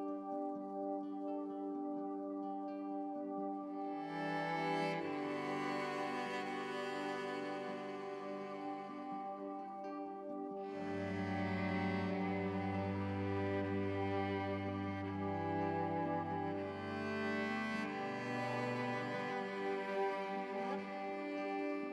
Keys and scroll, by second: 9.6 ctrl+z, 17.4 ctrl+z, 21.2 ctrl+u.